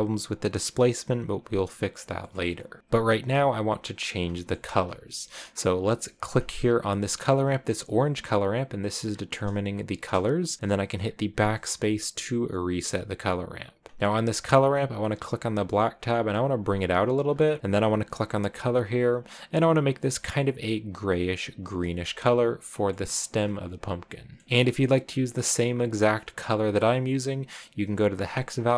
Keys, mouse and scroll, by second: 2.2 middle click, 2.8-6.3 scroll up 4, 4.3 middle click, 6.3-11.1 drag, 11.1 BackSpace, 13.1 scroll up 3, 14.1-14.7 scroll up 3, 15.3-17.4 drag, 17.4 middle click, 18.2-21.2 drag, 24.6 scroll up 1, 25.2 scroll up 1, 25.4 scroll down 2, 26.0 scroll down 1, 26.6 click.